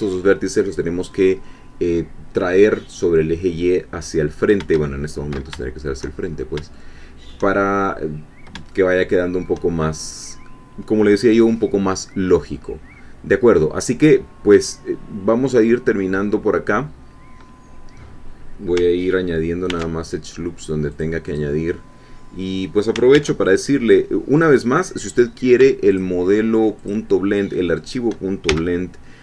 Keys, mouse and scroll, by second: 1.1 middle click, 5.6 shift+middle click, 6.2-7.2 shift+scroll up 3, 7.2 shift+scroll up 1, 8.7-10.0 shift+middle drag, 12.6-17.6 middle drag, 19.7 ctrl+r, 20.9 click, 23.2 ctrl+r, 23.4 ctrl+click, 26.0 shift+click, 27.8 shift+click, 28.5 shift+f.